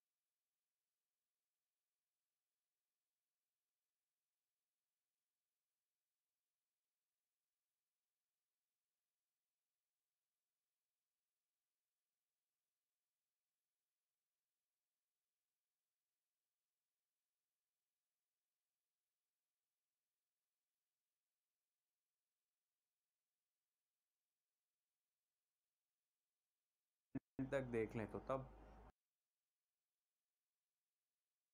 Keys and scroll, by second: 27.4 space, 28.9 space, 29.7 c.